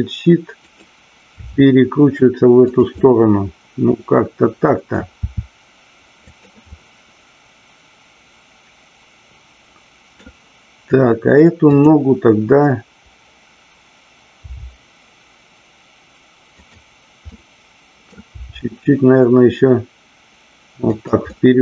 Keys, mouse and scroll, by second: 0.7 click, 2.7 click, 3.0-4.8 middle drag, 6.2 click, 6.6-10.1 middle drag, 16.6 click, 17.1 middle click, 20.9 click, 20.9 g, 21.3-21.6 middle drag.